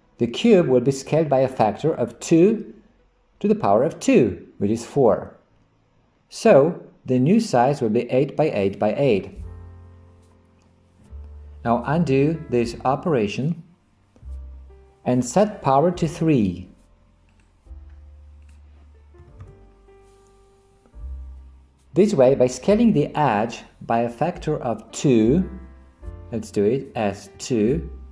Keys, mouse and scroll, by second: 7.1 click, 12.1 ctrl+z, 12.8 ctrl+z, 18.6-20.5 drag, 27.0 s.